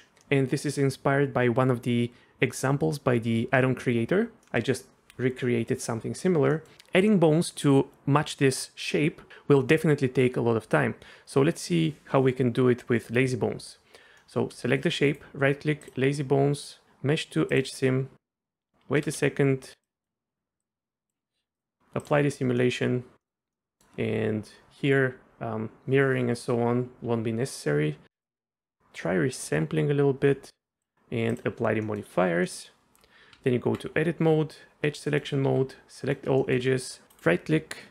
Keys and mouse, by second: 4.4-4.8 middle drag, 6.5 middle click, 14.2 middle click, 14.6 shift+middle drag, 15.2-17.9 drag, 19.0 space, 19.8 click, 20.6 click, 22.1 click, 22.6 middle click, 23.2 middle drag, 23.5 middle drag, 28.3-30.9 drag, 31.4-31.8 drag, 31.8 middle click, 32.5 click, 33.3 Tab, 35.1 click, 35.4 a, 36.0 click, 36.4 shift+click, 36.8 right click, 37.1 right click, 37.1-37.9 drag.